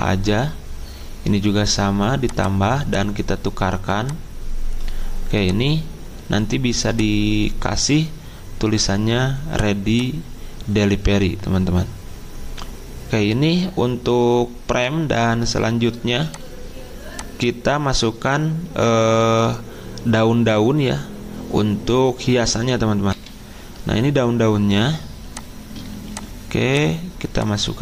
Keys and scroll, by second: 23.4 F10.